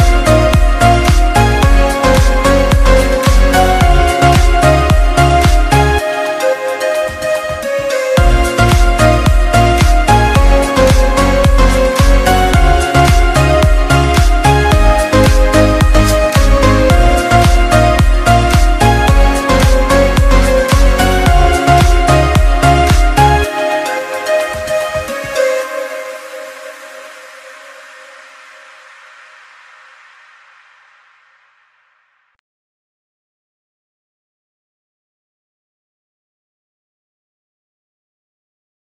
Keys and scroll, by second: 32.4 ctrl+=.